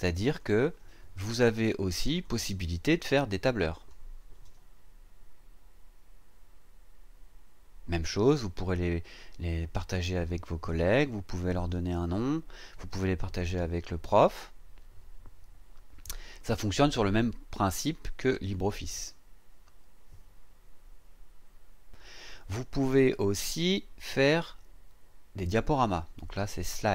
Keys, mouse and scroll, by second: 0.2 click, 2.1 click, 3.8 click, 11.5 click, 18.5 click, 22.7 click, 24.0-26.9 scroll down 1.